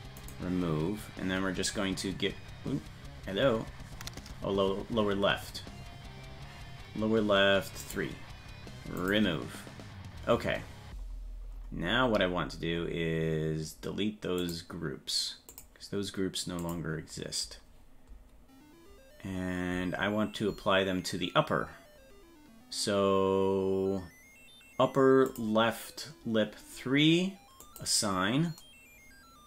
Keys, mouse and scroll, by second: 0.2 click, 7.8 click, 9.0 click, 10.6-11.6 scroll up 6, 11.6 scroll down 2, 11.7-12.8 scroll down 5, 12.8-14.0 scroll up 3, 14.0 scroll up 1, 14.4 click, 15.5 click, 16.6 click, 25.3 click, 27.6 click.